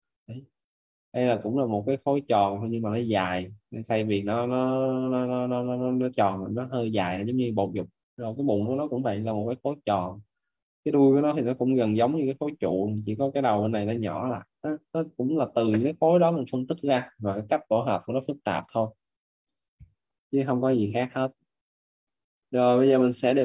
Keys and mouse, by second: 20.5 Escape, 22.0 right click.